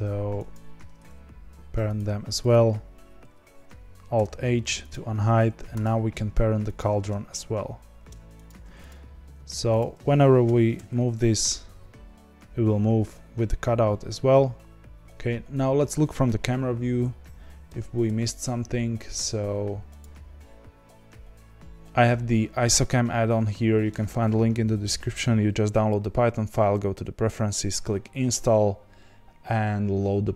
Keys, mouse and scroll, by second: 0.5 ctrl+p, 1.9 click, 2.5 click, 4.1 alt+h, 4.9 click, 5.8 click, 6.7 shift+click, 8.4 ctrl+p, 8.8 click, 9.7 click, 10.4 g, 15.0-18.6 middle drag, 18.6 n.